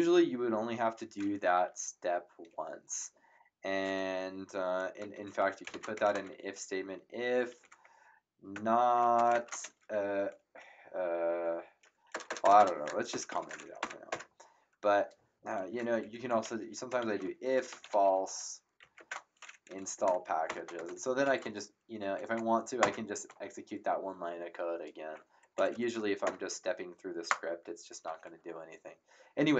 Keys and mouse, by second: 5.4-6.4 typing, 8.3-9.4 typing, 12.1 BackSpace, 13.1 shift+3, 13.8 End, 14.1 Return, 15.6 Up, 16.0 Delete, 17.0-18.8 typing, 18.9 shift+Return, 19.6 End, 19.9 Return, 19.9 KP_Enter, 20.7 Tab, 21.2 Up, 22.8 Return, 22.8 KP_Enter, 25.5 Up, 26.2 ctrl+KP_Enter.